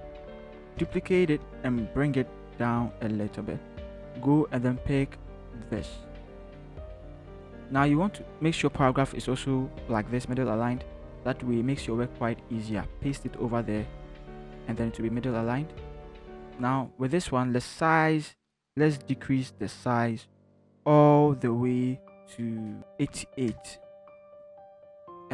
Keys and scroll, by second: 1.1 j, 6.9 ctrl+c, 12.8 ctrl+v, 23.0 8, 23.1 8, 23.5 Return.